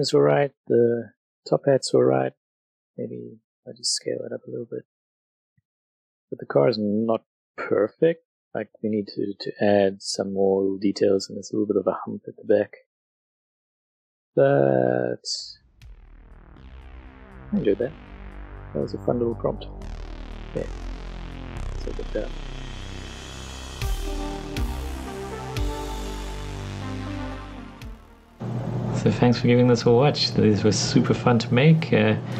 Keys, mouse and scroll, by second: 2.6-5.6 drag, 2.9 s, 5.7-6.1 middle drag, 6.1 drag, 8.6 middle click, 8.7 shift+middle click, 8.9 scroll, 9.1 middle click, 12.4 middle click, 12.6 Tab, 13.0 middle click, 14.4 click, 15.3 alt+shift+click, 16.7 alt+shift+a, 17.1 b, 17.2 click, 17.8 middle click, 18.3 click, 19.7 Tab, 19.8 middle click, 21.9 middle click, 22.6 Tab, 23.3 middle click, 23.6 Tab.